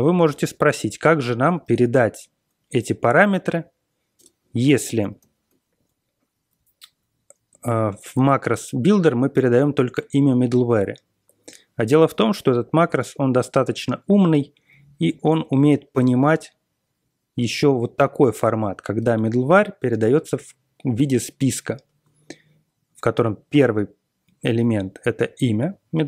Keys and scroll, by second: 0.2 ctrl+x, 1.6 ctrl+x, 3.5 Page_Down, 4.1 Return, 5.0 ctrl+l, 5.1 ctrl+l, 5.6 Page_Down, 8.1-8.8 typing, 9.6 ctrl+l, 10.5 Right, 11.0 Right, 11.8 Right, 14.2 Left, 15.0 alt+m, 15.9 shift+9, 17.0 Right, 17.7-18.1 Right, 18.4 Right, 18.6 Right, 19.2-20.1 typing.